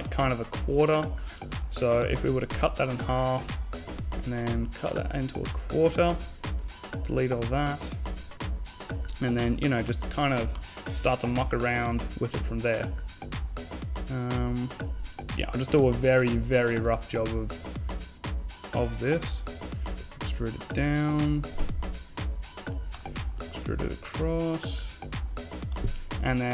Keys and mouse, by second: 1.5 x, 3.4 b, 5.4 x, 6.4 middle click, 6.9 a, 8.1 s, 10.6 g, 16.0-17.1 drag, 17.1 middle click, 17.6-18.7 drag, 18.9 e, 22.6 e, 26.3-26.5 right drag.